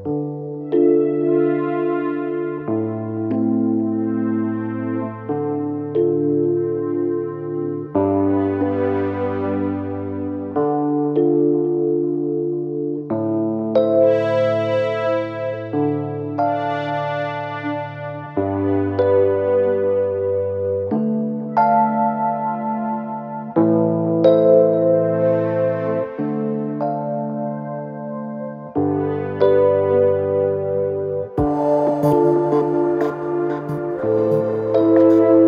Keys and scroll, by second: 3.9 4, 8.9 l, 9.0 i, 9.3 g, 9.5 t, 20.3 F1, 21.5 ctrl+d, 21.6 Escape, 24.5 2, 24.8 ], 26.8 ], 28.5 4, 32.2 2.